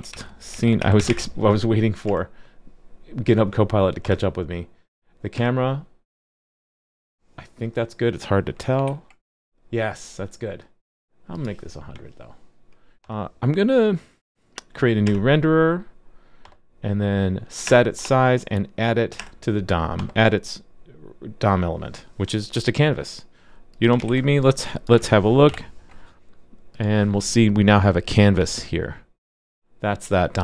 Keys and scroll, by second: 24.6 super+s, 25.5 alt+super+j.